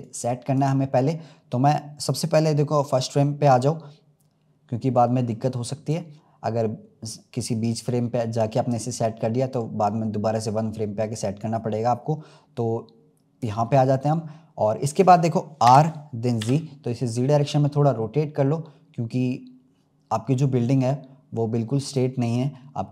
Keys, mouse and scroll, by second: 9.6-10.5 scroll up 1, 10.5 click, 13.7-14.1 scroll up 2, 14.5-15.6 scroll down 2, 15.6 r, 22.2-22.9 scroll down 2.